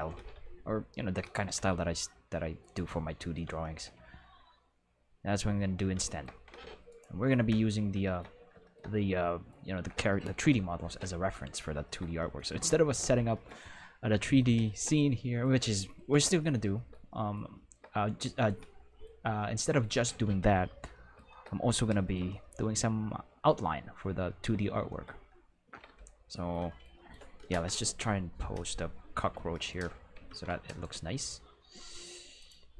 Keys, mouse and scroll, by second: 0.1-1.7 typing, 1.2 right click, 2.6 right click, 3.2 middle click, 4.5 middle click, 10.4 Delete, 27.5 Home, 30.6 right click, 31.1 g, 32.4 click.